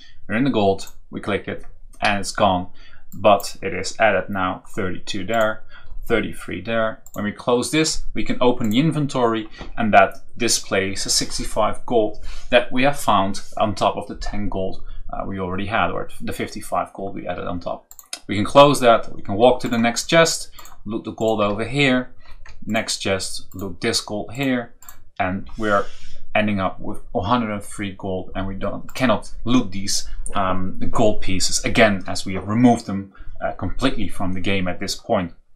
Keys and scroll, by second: 18.5 Right, 21.3 Up, 21.5 Right, 22.6 Right.